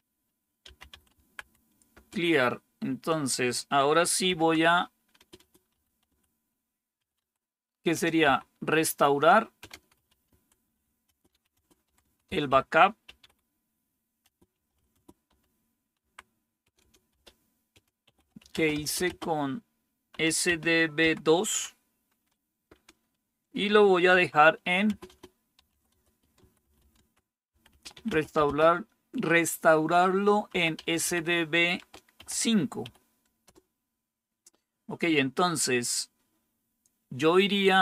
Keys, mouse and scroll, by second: 0.3-1.8 typing, 1.8 Return, 3.9-8.1 typing, 9.4-28.8 typing, 30.2-33.9 typing.